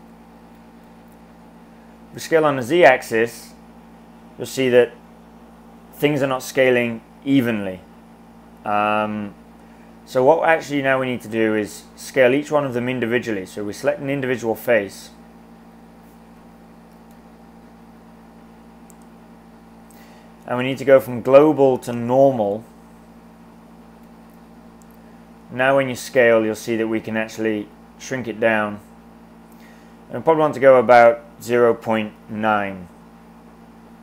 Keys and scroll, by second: 0.3-1.3 typing, 24.0 s, 31.3-32.6 typing.